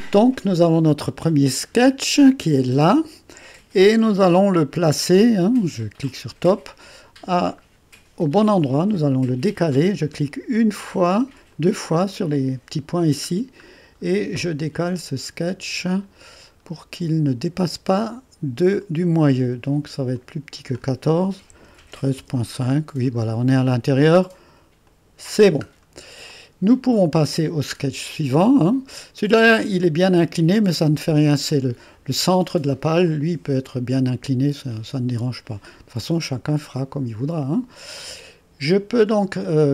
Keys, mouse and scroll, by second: 1.5 click, 2.0-4.2 drag, 4.3 2, 6.1-8.3 drag, 8.7 right click, 10.8 click, 11.6 click, 14.4-16.6 scroll up 1, 16.6-18.1 scroll up 1, 18.4-18.9 scroll up 1, 20.2 click, 21.2-22.7 typing, 24.9 click, 24.9 typing, 25.4 click, 25.7-26.2 scroll down 1, 26.3-27.5 drag, 27.5-28.2 scroll down 1, 28.2-30.3 drag, 33.1-35.8 drag, 37.3 click, 38.0 click.